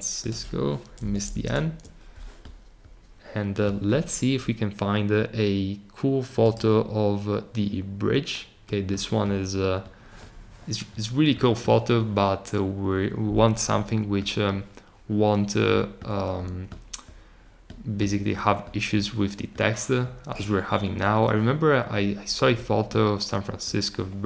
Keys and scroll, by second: 1.0 n.